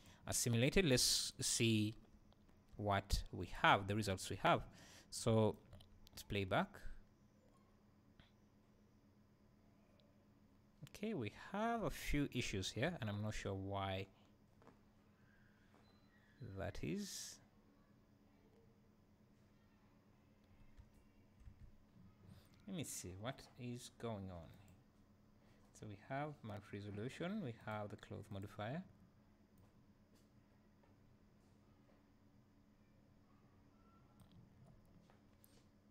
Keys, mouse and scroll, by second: 0.0-5.2 drag, 0.4-1.0 scroll down 1, 1.3-1.9 scroll down 1, 2.4 `, 3.7-4.0 scroll down 1, 4.0 `, 5.2-24.5 right drag, 5.7 space, 13.0 `, 24.3 Escape, 24.5 click, 27.6 click, 28.3 click, 29.7-35.9 right drag.